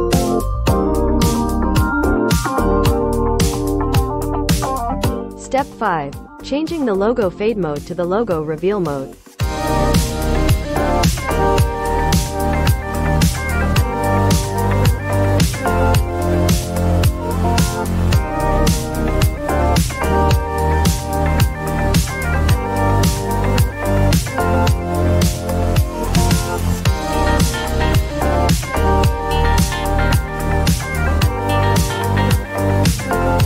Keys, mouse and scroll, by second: 3.0 click, 10.2 click, 10.6 right click, 12.1 click, 13.7 x, 13.8 x, 15.2 x, 16.4-18.4 drag, 18.4-20.3 right drag, 24.1 click, 27.0 click, 27.3 click, 29.8 click.